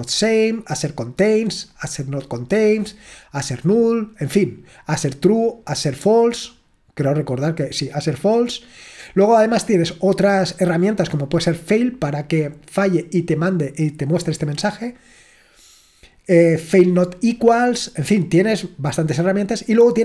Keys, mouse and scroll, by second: 1.9-2.8 scroll down 2, 4.9-5.7 scroll down 2, 5.7-6.5 scroll down 1, 6.5-8.3 scroll down 3, 10.2-12.8 drag, 13.5-15.1 drag.